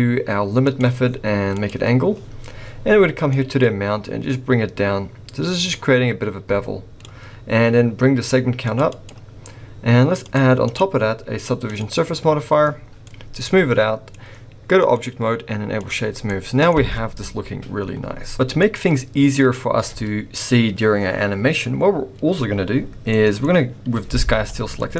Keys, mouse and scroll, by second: 0.6 click, 1.6 click, 3.3 click, 8.7 click, 9.0 click, 10.2 click, 10.7 click, 12.8 scroll down 3, 13.0 middle click, 14.2-14.8 scroll up 2, 14.8 click, 16.2 middle click, 18.1 scroll down 1, 18.6 middle click, 19.6-21.6 scroll up 1, 23.1 middle click, 24.3 g.